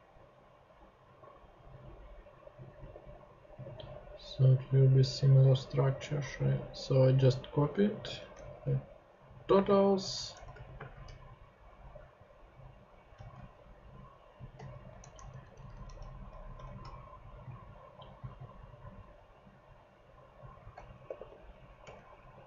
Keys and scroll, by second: 1.6 super+x, 2.8 super+v, 3.6 super+x, 6.0 super+x, 7.7 Up, 8.4 super+z, 8.6 super+Down, 9.0 Right, 9.2 super+v, 9.5 super+space, 10.3 BackSpace, 10.6 shift+;, 10.7 shift+space, 14.7 shift+super+Right, 15.0 shift+super+Left, 16.5 shift+[, 20.8-21.6 typing, 21.8 Return.